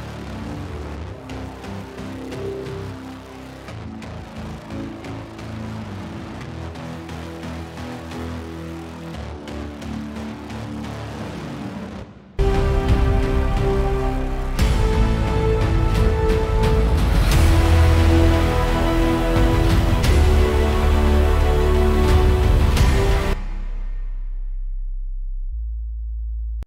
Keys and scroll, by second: 23.5 s.